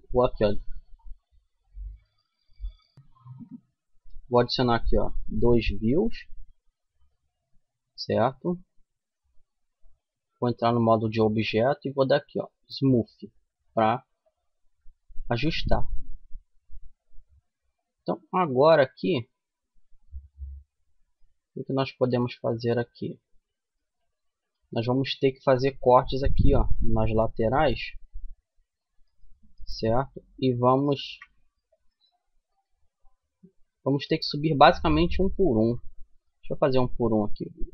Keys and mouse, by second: 6.0-8.3 middle drag, 9.5 Tab, 12.8 Tab, 13.4 middle click, 13.6-16.7 middle drag, 16.9 middle click, 18.5 Tab, 20.5 Tab, 21.5-25.3 middle drag, 25.3 ctrl+r, 27.6-30.2 middle drag, 30.2 ctrl+r, 32.4 middle click, 35.4 ctrl+z, 35.8 ctrl+z.